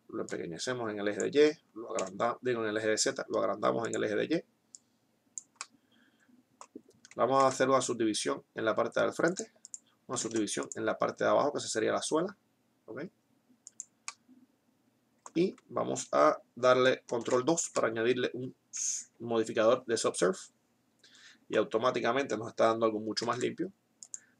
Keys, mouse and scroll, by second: 0.6 click, 1.6 s, 6.3 middle click, 7.6 ctrl+r, 10.4 ctrl+r, 14.4-16.8 middle drag, 17.4 ctrl+2, 23.6 ctrl+r.